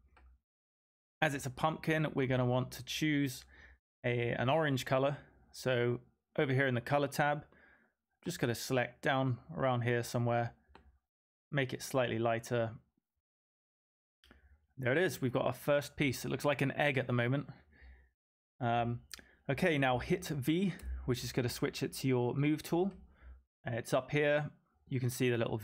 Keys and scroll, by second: 20.7 v.